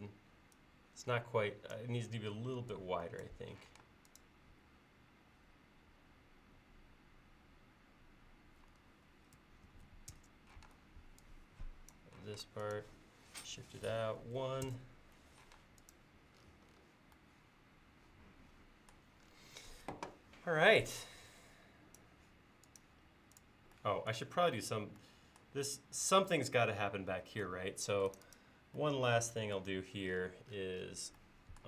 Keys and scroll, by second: 3.7 m, 9.7 1, 10.2 Return, 10.7 space, 12.3 m, 14.3 1, 14.7 Return.